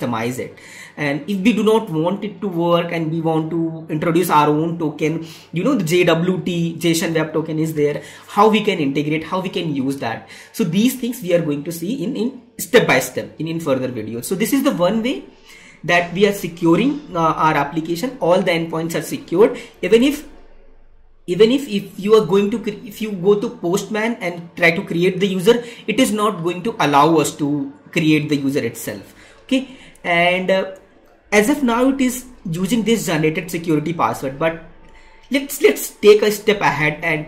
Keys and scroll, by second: 19.8 alt+Tab, 22.0 alt+Escape, 29.8 alt+Tab.